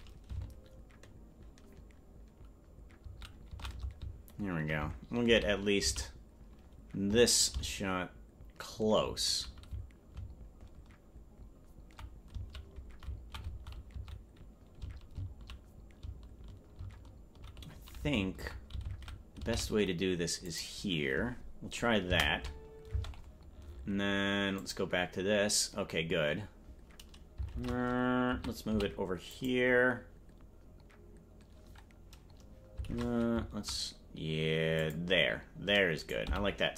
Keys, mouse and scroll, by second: 22.9 space, 24.6 click, 27.5 shift+`, 35.9 right click, 36.2 g.